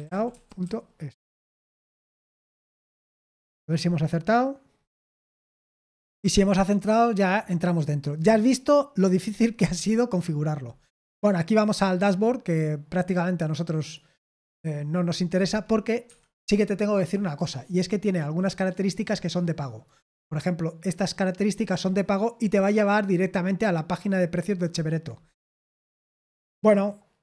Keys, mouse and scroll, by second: 0.0-0.2 typing, 1.4-1.7 typing, 10.7-11.1 scroll up 2, 13.7 click, 16.0 Escape, 19.8 click, 25.1-27.2 scroll down 1.